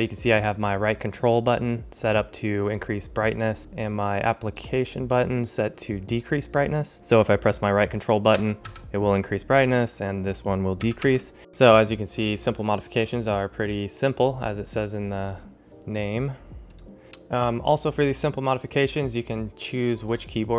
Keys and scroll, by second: 11.3 ctrl+alt+shift+super++, 17.0 ctrl+alt+shift+super++.